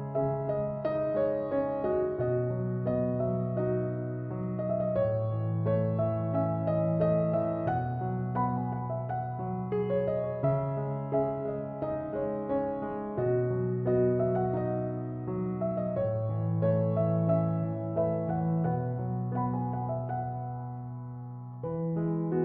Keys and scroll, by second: 5.8-6.6 typing.